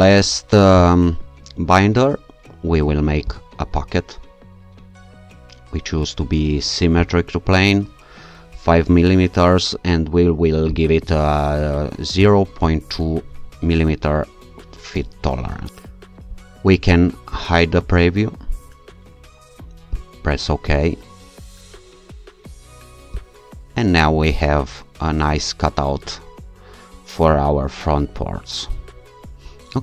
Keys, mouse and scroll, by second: 3.3 click, 7.0 click, 10.7 click, 12.2 BackSpace, 14.9 2, 15.7 click, 17.4 click, 19.9 click, 23.2 click, 27.0-27.8 alt+scroll up 2, 27.8 alt+scroll up 1, 28.3-29.2 alt+scroll down 2, 29.2 ctrl+r.